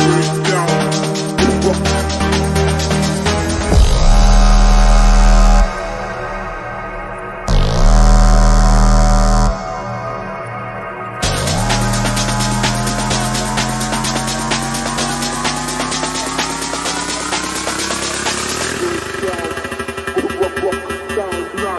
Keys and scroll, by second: 0.0 shift+F2, 18.7 F3.